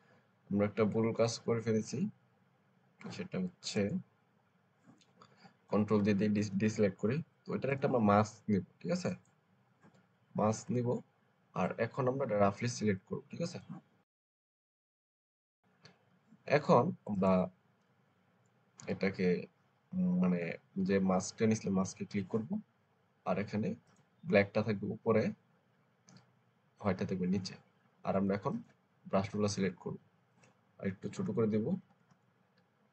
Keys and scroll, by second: 6.2 ctrl+d, 31.0-32.0 typing.